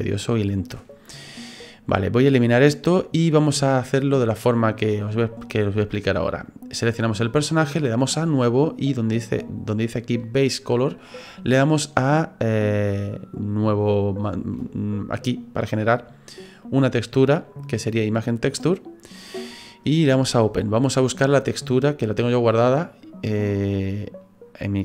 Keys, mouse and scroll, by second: 2.4 click, 6.4 right click, 8.1 click, 12.9 click, 16.6 click, 20.3 click.